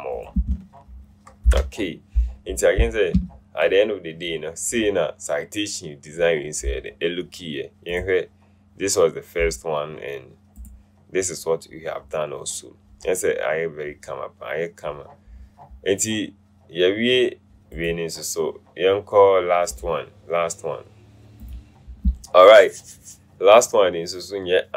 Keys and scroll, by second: 1.6 ctrl+0.